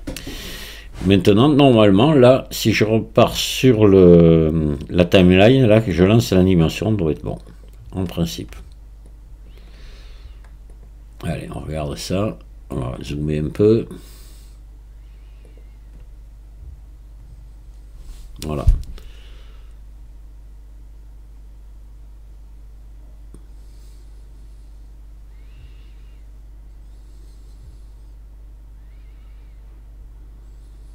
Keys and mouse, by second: 5.1-7.8 drag, 9.1 click, 15.6 click.